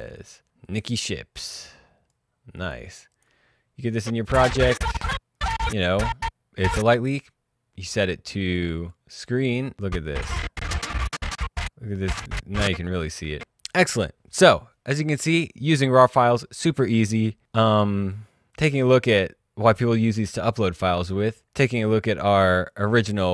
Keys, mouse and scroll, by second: 0.6-2.3 drag, 7.9 click, 9.1 click, 9.7 space, 10.7 click, 13.1 space, 13.6 click, 17.1 click, 19.2 click, 22.7 alt+click.